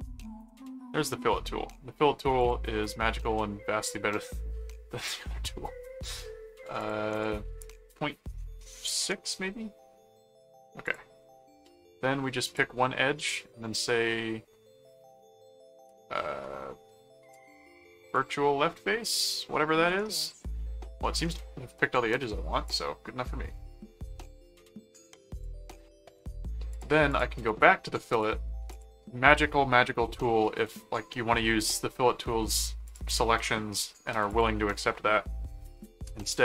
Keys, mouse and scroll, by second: 0.0-0.3 typing, 0.4 Return, 2.4 click, 6.8 click, 10.8 click, 12.4 click, 17.3 click, 19.9-20.9 middle drag, 22.7 click, 25.3 click, 26.1 right click, 26.7 click, 27.5 right click, 28.1 right click, 28.7 click, 32.8 click, 34.3 click.